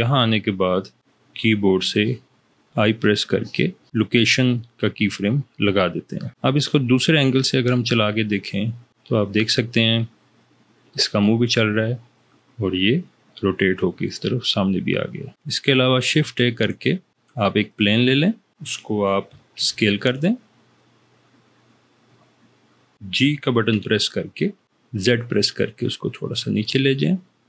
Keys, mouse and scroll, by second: 2.6 i, 16.1 shift+a, 19.3 s, 23.7 g, 24.7 z.